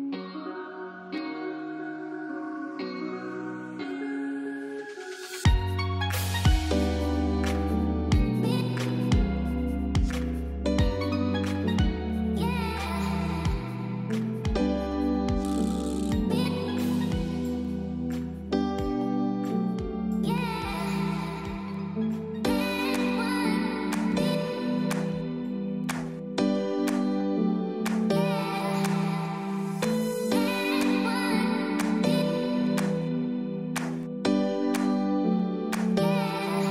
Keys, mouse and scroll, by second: 0.6 click, 2.0 space, 2.1 click, 2.5 space, 2.7 click, 2.9 space, 3.1 click, 3.4 space, 4.6 ctrl+shift+click, 8.0 ctrl+alt+shift+e, 8.6 click, 14.1 z, 14.5 click, 15.6 ctrl+j, 16.3 ctrl+shift+a, 20.5 click, 21.3 space, 21.5 click, 21.5 space, 21.7 click, 26.4 click, 27.0 click, 30.0 alt+Num_Lock, 30.0 click, 30.9-33.5 typing, 31.1 click, 32.3 click, 33.7 click, 35.0-36.7 typing.